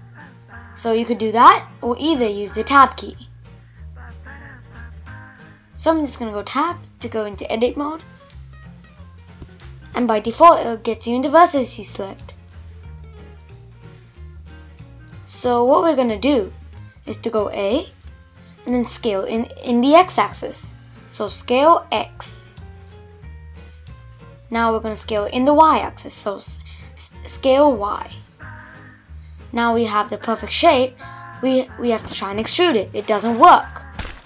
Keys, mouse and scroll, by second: 1.0 Tab, 1.6 Tab, 2.1 Tab, 2.6 Tab, 3.4 Tab, 4.1 Tab, 5.6-7.4 middle drag, 7.4-7.9 scroll up 3, 7.9-9.0 middle drag, 9.0 click, 9.8 click, 10.9 click, 11.9 click, 12.6-14.0 middle drag, 14.0 a, 15.2 scroll down 2, 15.4-16.5 middle drag, 16.5 s, 21.0-22.5 middle drag, 22.5 s, 25.8-28.2 middle drag, 28.2 e, 31.0 ctrl+z, 31.7 ctrl+z, 32.9 ctrl+shift+z.